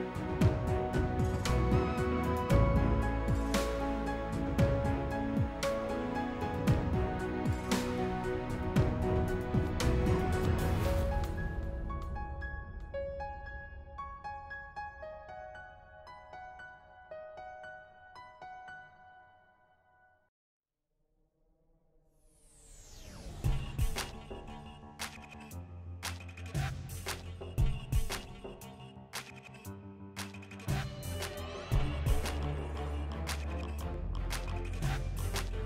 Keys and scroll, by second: 29.2 s.